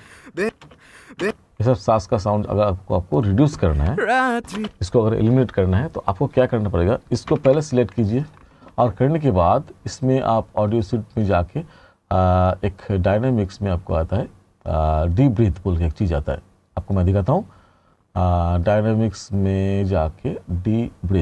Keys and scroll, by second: 3.6 space, 7.3 r.